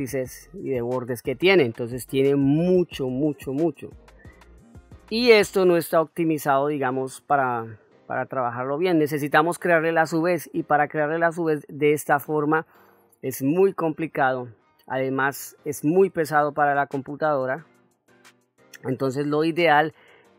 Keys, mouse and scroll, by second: 4.7 middle click, 6.9 middle click, 10.3 middle click, 12.6 middle click, 13.6 middle click, 14.8 ctrl+middle click, 16.0 middle click, 18.2 Tab, 19.1 middle click.